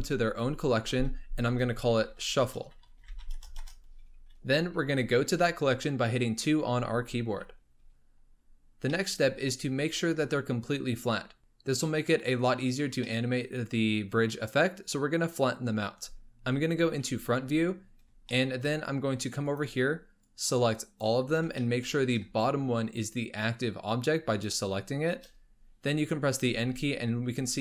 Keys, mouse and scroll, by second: 3.0 f, 3.6 Return, 6.4 2, 8.2-8.9 scroll up 2, 8.9-11.4 middle drag, 11.4-13.1 scroll up 1, 13.1-16.1 middle drag, 16.9 KP_1, 18.4-18.8 shift+middle drag, 18.8-19.3 scroll up 1, 19.3 scroll up 1, 19.5 click, 20.2 click, 21.3 scroll up 3, 21.6 shift+middle click, 21.9-24.3 scroll up 2, 24.3 shift+click, 26.4 n.